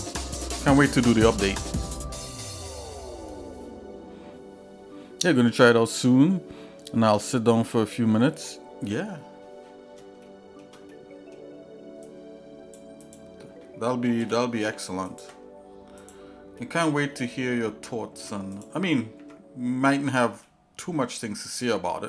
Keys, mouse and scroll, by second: 10.2 shift+middle click, 10.9 middle click, 12.0 click, 13.1 click, 14.2 g, 16.0 click, 16.6 middle click, 17.1-17.5 scroll down 2, 17.6 middle click, 18.1 Tab, 18.5 click, 19.2 Tab, 20.4 shift+middle click, 21.4 shift+middle click.